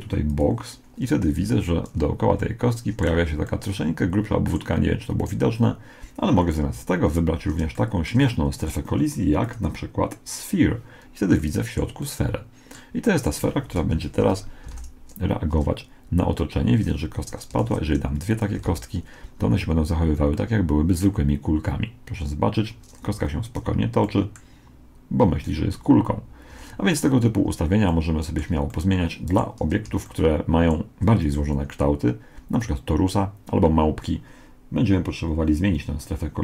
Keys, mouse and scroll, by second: 1.4 z, 1.9-5.0 middle drag, 3.2 z, 5.2 right click, 6.8 z, 7.0 middle click, 9.4-11.4 drag, 13.9 KP_1, 14.7 alt+a, 17.0 Escape, 17.6 shift+d, 18.6 alt+a, 23.5 z, 24.1-25.8 middle drag, 26.6 Escape, 27.9-32.0 middle drag.